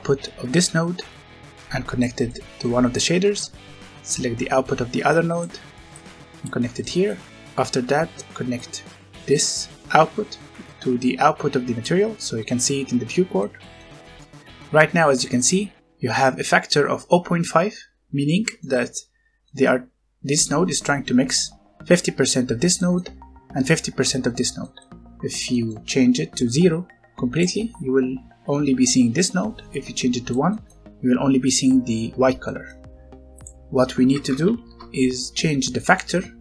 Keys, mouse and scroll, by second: 2.2 middle click, 2.8 scroll up 1, 4.1 click, 6.6 scroll down 1, 6.8 middle click, 7.4 click, 12.6-13.3 scroll up 1, 13.3 middle click, 14.5-15.0 scroll up 1, 18.3 middle click, 18.7 scroll down 1, 19.3 middle click, 20.4 click, 21.0 scroll down 1, 21.3 middle click, 24.3-25.0 scroll up 2, 24.5 middle click, 25.4 middle click, 25.7 scroll up 1, 26.3 click, 27.6 scroll down 1, 29.6 click, 30.4 middle click, 32.7 scroll up 1, 33.3 click, 34.1 KP_0, 34.3 KP_5, 34.6 KP_Enter, 35.6 click.